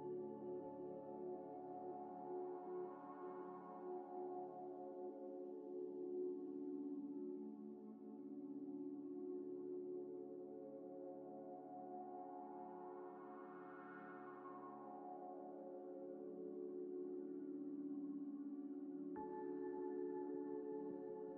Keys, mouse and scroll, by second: 0.9 3, 1.4 shift+click, 3.7 click, 5.9 Tab, 6.6 middle click, 6.8 right click, 7.6 scroll down 1, 9.5 scroll up 1, 9.9 Tab, 11.0 shift+click, 11.1 shift+click, 11.4-12.2 typing, 15.8 shift+click, 17.9 scroll down 1, 18.3 middle click, 18.5 scroll down 1, 18.8 middle click, 20.3 scroll up 1, 21.0 middle click.